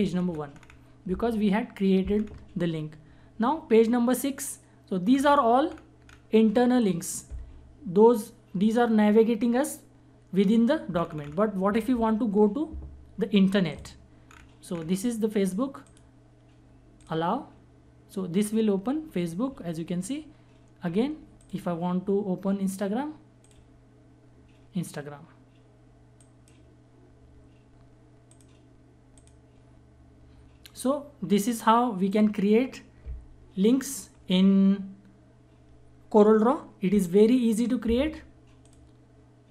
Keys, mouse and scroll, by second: 3.7 click, 3.7 click, 4.7 scroll down 1, 6.3 click, 10.5 scroll down 1, 13.2 click, 13.8 scroll down 1, 15.4 click, 20.9 click, 25.7 click, 31.7 click, 38.2 click.